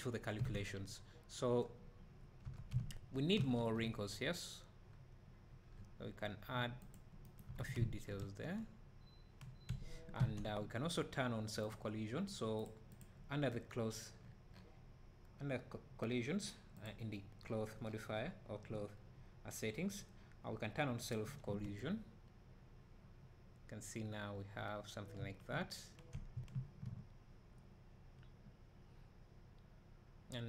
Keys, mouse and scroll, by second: 0.4 Escape, 2.6 Tab, 2.8 `, 3.6 ctrl+r, 7.6 Tab, 7.7 `, 8.2 space, 21.0 click, 21.5 space, 26.4 Escape, 29.0-29.6 middle drag, 29.0 `, 30.0 middle click, 30.2 middle drag.